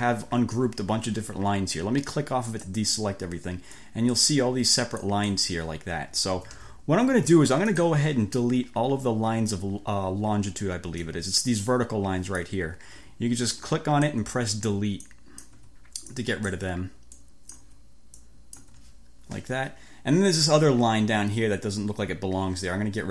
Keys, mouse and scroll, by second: 2.5 click, 3.7 click, 5.1 click, 6.5 ctrl+z, 7.7 click, 11.1-12.7 drag, 13.1 Delete, 13.7-14.5 drag, 14.3 Delete, 15.1 click, 15.7 Delete, 16.7 Delete, 17.7 Delete, 18.2-18.9 drag, 18.7 Delete.